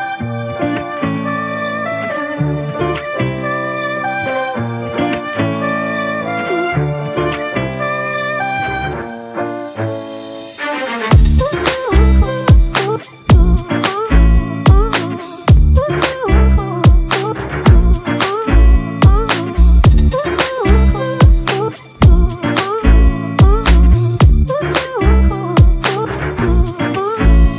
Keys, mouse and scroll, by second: 16.0 double click, 20.9 double click.